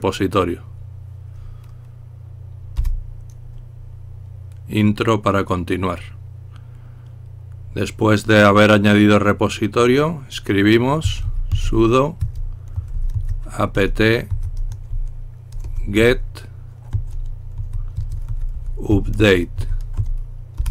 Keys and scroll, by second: 3.0 Return, 10.9-15.5 typing, 16.9-20.4 typing, 20.5 Return.